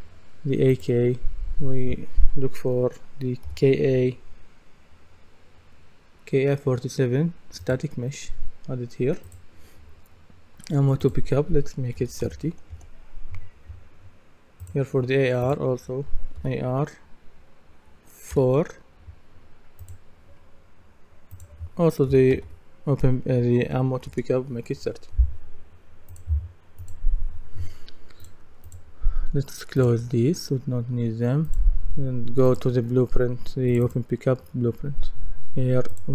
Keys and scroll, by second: 3.2-4.4 typing, 12.0 KP_3, 12.7 Return, 15.9-16.9 typing, 22.1 KP_3, 24.1 Return.